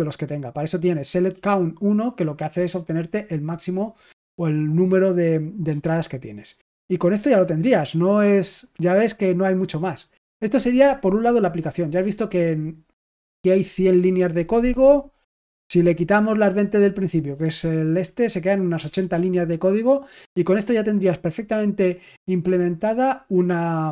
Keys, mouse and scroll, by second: 5.6-7.6 typing, 15.2 typing, 18.7 shift+g.